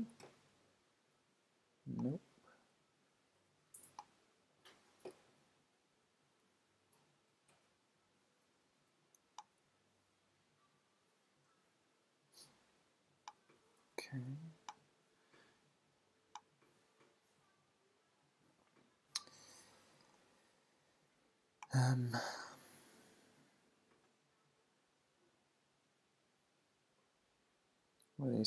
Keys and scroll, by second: 5.5 super+=, 6.0 super+-, 6.4 super+0, 8.0 super+=, 10.5 Up.